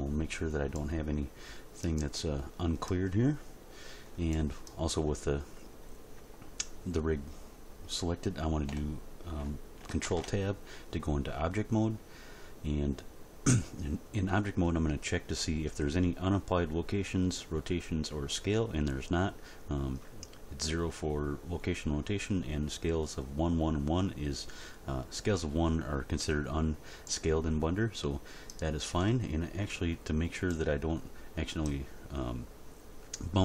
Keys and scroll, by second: 10.1 ctrl+Tab.